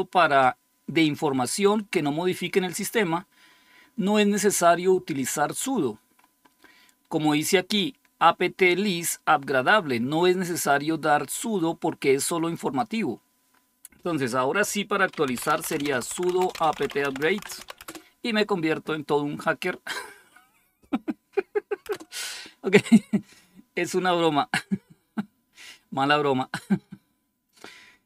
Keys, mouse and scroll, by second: 3.3-4.7 scroll up 2, 5.5-10.5 scroll up 4, 10.5-13.0 drag, 13.0-14.9 scroll down 3, 14.9-15.2 scroll down 1, 15.0-18.0 typing, 21.8 Return.